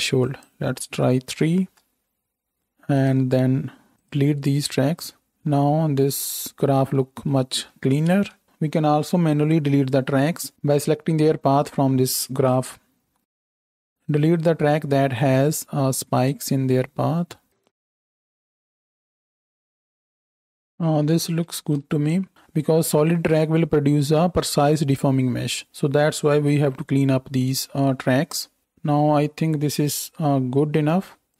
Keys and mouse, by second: 1.3-7.6 drag, 3.9 x, 8.1 ctrl+space, 13.0 x, 15.8 x, 17.5-20.0 typing, 18.0-26.5 drag, 18.2 middle click, 18.2 right click, 18.5 right drag, 19.6 right click, 21.7 ctrl+space, 26.5 Home, 28.0-31.3 drag.